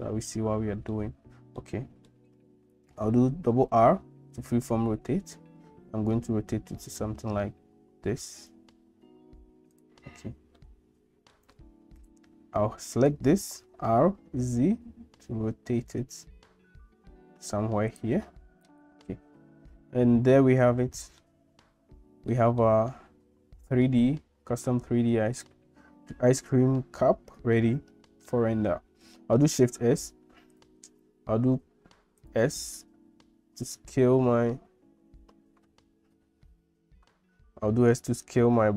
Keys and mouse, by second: 1.6 middle click, 3.4 r, 10.6 middle click, 13.7 r, 21.3-22.3 shift+middle drag, 22.7-23.9 middle drag, 27.6 middle click, 29.6 shift+s, 32.2 click, 33.2 s.